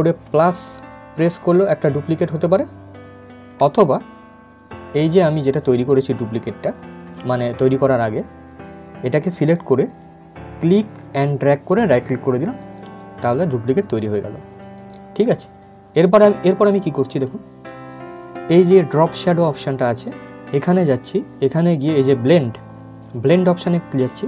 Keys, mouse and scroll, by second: 1.3-3.3 drag, 3.3 ctrl+z, 4.7-11.3 drag, 11.3 right click, 12.3 click, 19.8-22.9 drag, 23.3 click.